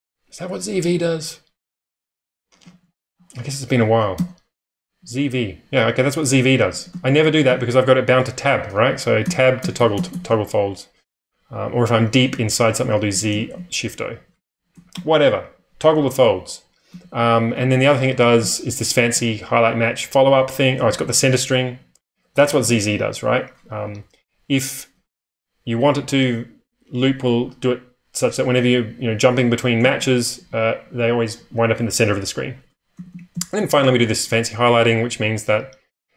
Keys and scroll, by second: 2.6 ctrl+o, 2.8 ctrl+o, 4.1 Tab, 4.7-10.2 typing, 9.2 Tab, 9.5 Tab, 9.7 Tab, 9.9 Tab, 12.2 Tab, 13.0 z, 13.3 shift+o, 14.1 ⟲, 14.7 j, 16.6-19.2 typing, 20.7 k, 22.4 typing, 29.5-34.3 typing, 35.8-36.1 typing.